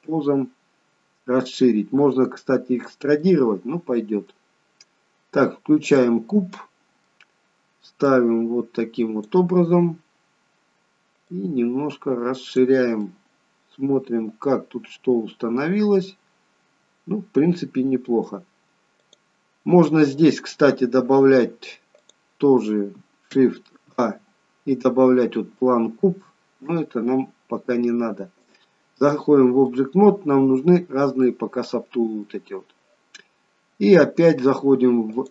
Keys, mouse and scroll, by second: 1.5 click, 3.3 middle click, 5.8 click, 6.6 middle click, 8.0 click, 11.3 click, 13.1 middle click, 19.0 click, 22.0 click, 23.9 shift+a, 28.4 click, 29.7 middle click, 31.2 middle click, 35.1 click.